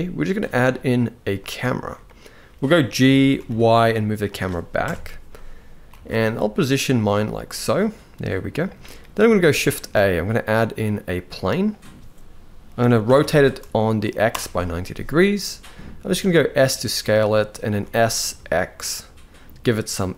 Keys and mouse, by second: 1.7-2.1 middle drag, 2.6 g, 4.5 KP_0, 5.5 g, 6.8 g, 9.4 shift+a, 12.5 r, 15.7 s, 17.3 s.